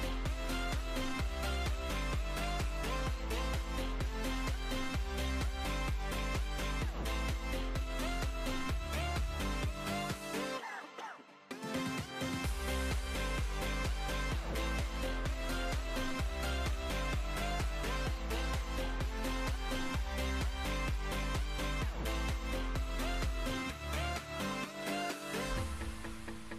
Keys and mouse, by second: 0.0-1.8 typing, 0.1 ctrl+r, 0.4 ctrl+r, 2.3 Tab, 2.9 Tab, 3.0 ctrl+r, 3.5 b, 3.8 g, 4.2 Tab, 7.2 middle click, 7.6 Tab, 7.8 Tab, 8.4 Tab, 8.5 Tab, 8.7 Tab, 8.8 Tab, 10.5 Tab, 11.5 ctrl+r, 18.6 KP_7, 22.7 z, 23.1 b, 25.9 Delete.